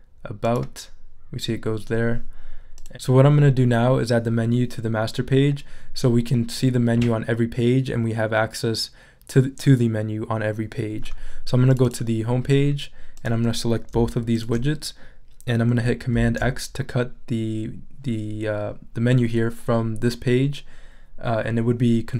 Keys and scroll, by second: 16.1 super+x.